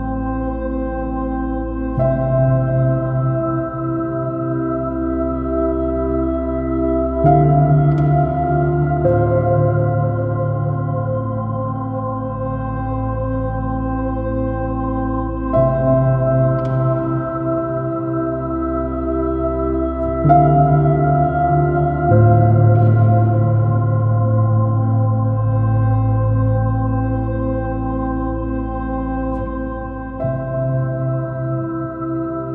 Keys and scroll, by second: 0.3 space, 2.5 super+-, 6.7 super++, 16.5 super+-, 27.7 super+b.